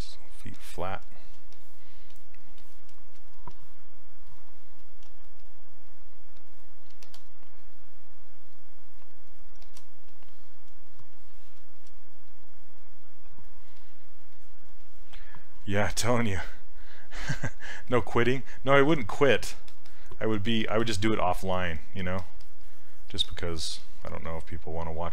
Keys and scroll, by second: 5.1 s.